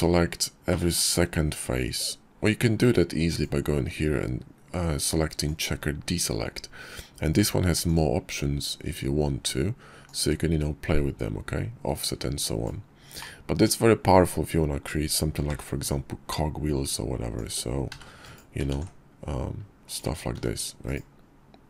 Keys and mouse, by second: 2.4-4.7 drag, 6.9 click, 9.1-11.7 drag, 12.3 click, 14.6 i, 17.0 e, 17.8 alt+s, 19.4 s, 20.8 click, 21.3-21.6 drag.